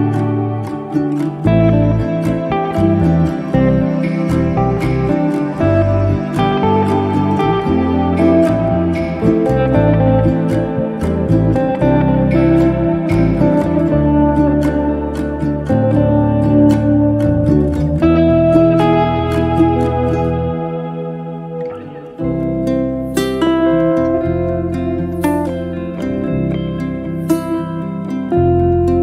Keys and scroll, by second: 0.1 t, 3.8 space, 6.2 b, 25.6 t.